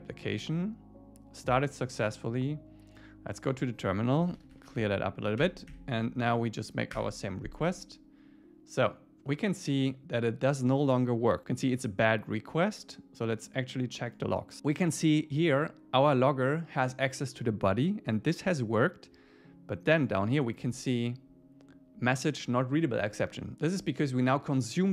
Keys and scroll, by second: 4.8 Return, 5.4 Up, 7.0 Return.